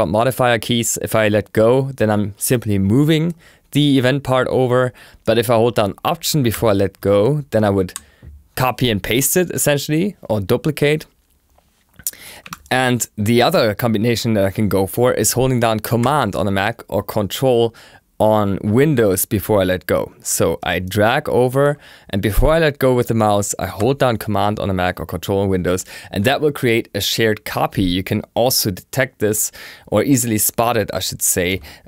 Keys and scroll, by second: 12.4 BackSpace.